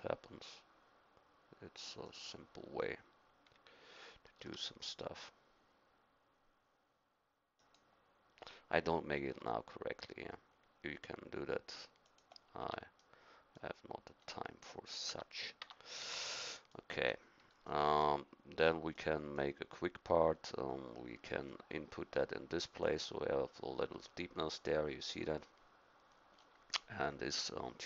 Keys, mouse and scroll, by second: 4.4 s, 9.2 g, 12.6 Tab, 15.1 Tab, 15.6 Tab, 16.0 a, 16.5-17.7 middle drag, 23.8 middle click, 26.3 middle click.